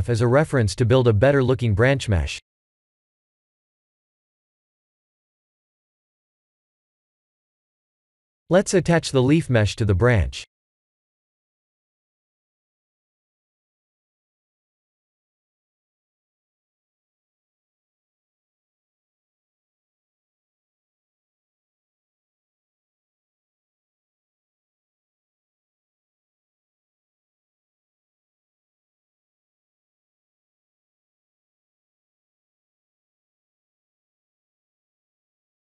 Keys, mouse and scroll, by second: 0.7 click, 1.3-4.1 middle drag, 5.5 click, 6.8 click, 7.4 KP_7, 8.1 r, 11.6 KP_3, 12.0 KP_1, 12.9 g, 15.7 r, 16.8 s, 18.4-19.0 middle drag, 19.2-19.8 scroll down 2, 19.8 click, 20.2-22.7 middle drag, 24.0 click, 26.1-26.7 drag, 27.1 s, 28.6 KP_3, 29.0 KP_1, 29.7-30.5 scroll up 2, 30.2 g, 32.6 s, 34.2 g.